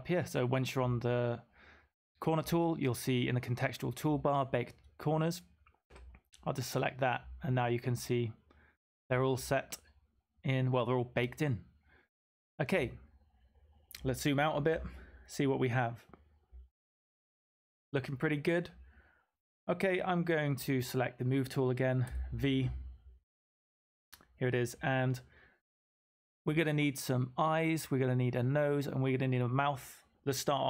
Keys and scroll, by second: 22.0 v.